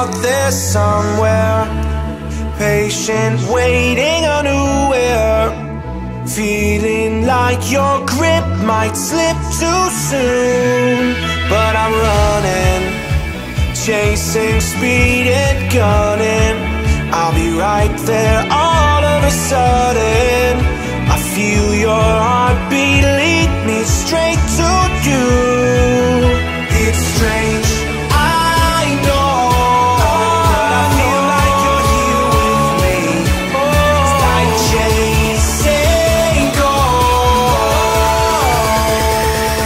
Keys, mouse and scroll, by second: 0.0-0.3 typing, 0.9 click, 1.5 f, 1.6 click, 2.1 space, 2.6 click, 2.9 scroll down 1, 3.3 ctrl+shift+middle click, 3.8 click, 4.4 f, 4.5 click, 4.8 space, 5.0 click, 5.8 f, 5.9 click, 6.2 space, 6.3-6.7 scroll down 1, 6.8 shift+middle click, 7.9-8.7 scroll up 1, 8.7 p, 9.0 click, 9.3 space, 9.4 click, 11.1 p, 11.3 click, 12.3 5, 12.7 Return, 13.5 click, 13.8 space, 14.0-14.3 scroll down 1, 14.5 click, 15.4 shift+e, 15.8 space, 16.0-16.4 scroll up 1, 16.4 shift+middle click, 17.1 click, 17.8 middle click, 19.5 scroll up 1, 19.8 shift+middle click, 20.8 t, 21.3 click, 23.7-25.4 typing, 25.1 Return, 25.7-26.3 scroll up 1, 26.5 t, 26.7-28.2 scroll down 1, 28.2 click, 30.1 6, 30.6 shift+', 30.8 Return, 31.1 space, 31.2-31.5 scroll up 1, 32.4 r, 32.7 click, 33.7 space, 33.8 scroll up 1, 34.2 shift+middle click, 35.6 a, 36.1 click, 39.1-39.6 typing.